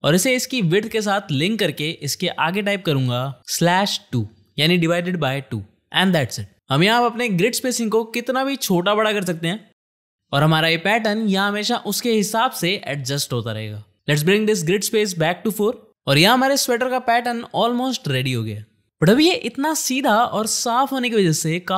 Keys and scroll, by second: 7.2 space, 10.1 shift+/, 15.2 4, 15.7 Return, 17.8 space.